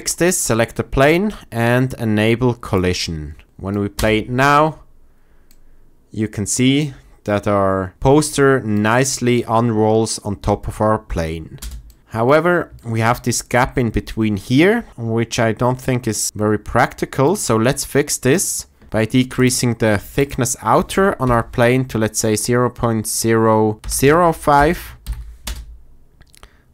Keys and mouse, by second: 0.1 click, 2.7 click, 3.9 space, 8.2-8.8 drag, 11.5 space, 12.9 click, 17.7 click, 19.4-24.5 drag, 25.0 shift+Left, 25.4 space.